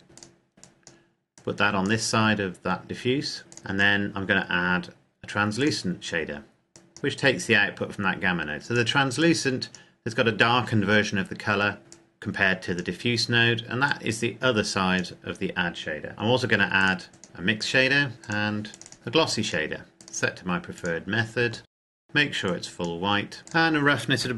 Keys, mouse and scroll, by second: 0.1 click, 3.5 click, 5.6 click, 11.9 click, 21.7 click.